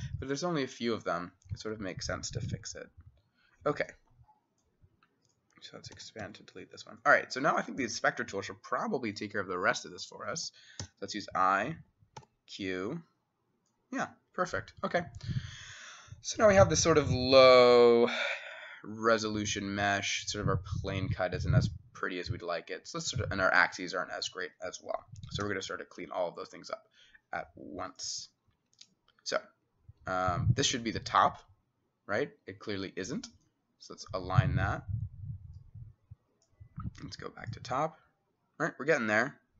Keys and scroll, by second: 1.6 Escape, 2.5 s, 6.0 e, 6.3 x, 9.5-10.9 typing, 10.4 Escape, 12.2 q, 25.5 t.